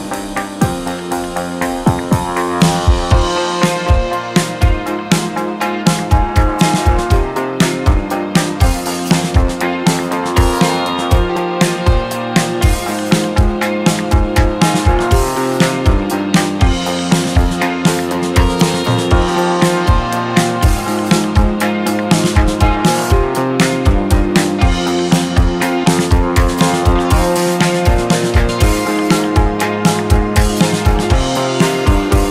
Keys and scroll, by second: 1.3 2, 3.5 KP_1, 3.6 KP_0, 5.7 KP_1, 5.9 KP_0, 10.1 space, 17.0 space, 19.3 space, 25.6 space, 27.2 z, 31.4 Escape.